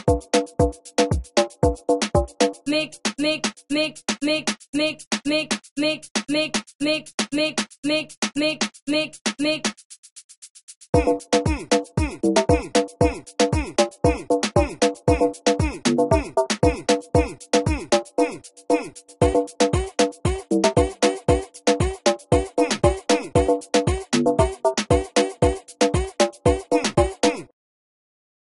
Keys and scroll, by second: 4.1 alt+F8, 10.1 shift+Return, 10.6 shift+Return, 12.3 shift+Return, 14.4 F1, 14.7 F1.